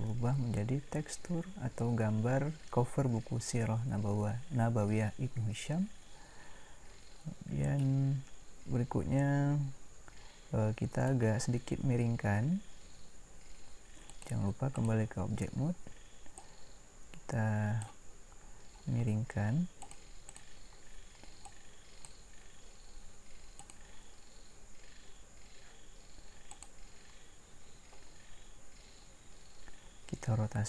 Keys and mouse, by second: 7.9 middle click, 14.9 click, 17.6-18.8 drag, 18.8 middle click.